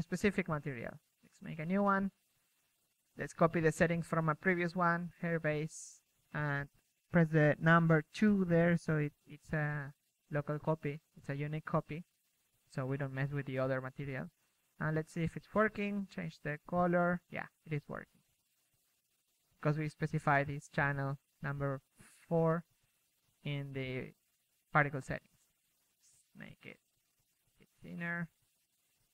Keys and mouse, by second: 4.7 middle click, 7.2-11.5 middle drag, 13.0-14.5 middle drag, 13.5 KP_1, 16.0 KP_3, 16.2-17.5 middle drag, 16.5 Tab, 16.8 Tab, 17.8 KP_3, 23.3-24.5 middle drag, 24.5-25.9 drag, 25.9 middle click, 27.9 KP_0.